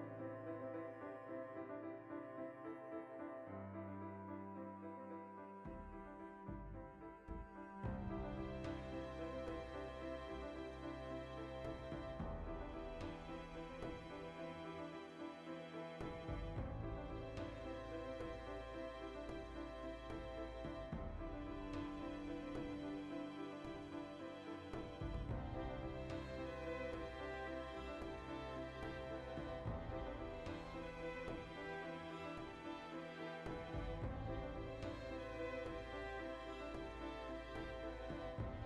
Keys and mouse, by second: 0.5 alt+q, 1.5 z, 2.0 3, 2.3 a, 4.9 z, 6.9 alt+h, 7.4 a, 8.3 Tab, 9.3-9.6 drag, 9.6-12.2 middle drag, 11.1 alt+q, 11.5 Tab, 12.2 click, 19.2 click, 20.7-23.5 ctrl+middle drag, 23.5 Tab, 23.6-24.7 shift+middle drag, 24.7 click, 24.9 shift+middle click, 25.3 Tab, 25.5 right click, 25.9 l, 26.4-28.5 ctrl+middle drag, 28.5-33.2 drag, 29.8 Tab, 30.5 Tab, 35.9-37.2 ctrl+shift+middle drag, 37.2 alt+right click, 37.5 shift+middle click, 38.1 alt+shift+right click, 38.5 ctrl+KP_Add.